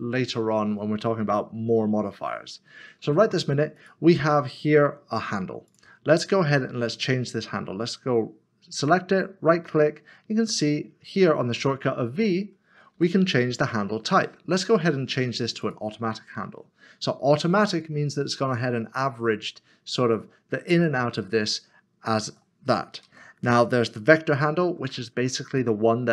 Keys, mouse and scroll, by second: 3.7 3, 3.8 click, 9.1 right click, 13.2 v, 15.6 click, 22.8 click, 23.0 ctrl+z, 25.5 v.